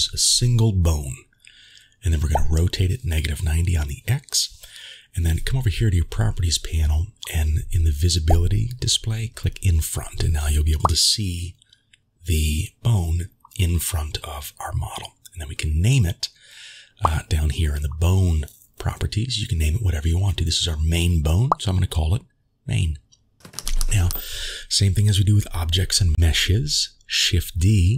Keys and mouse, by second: 3.0 r, 7.8 click, 10.8 click, 15.2 click, 23.4 shift+click.